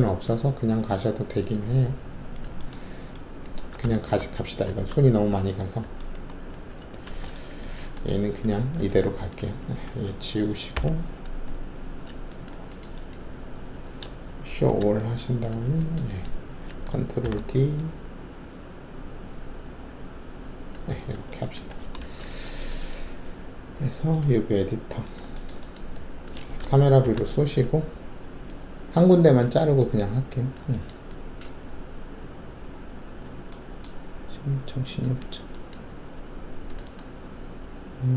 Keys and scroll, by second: 3.7 alt+w, 4.1 alt+`, 6.5 ctrl+alt+shift+a, 7.7 alt+shift+a, 10.7 Delete, 14.4 alt+shift+r, 17.2 ctrl+alt+d, 22.0 alt+shift+a, 27.0 ctrl+alt+shift+c.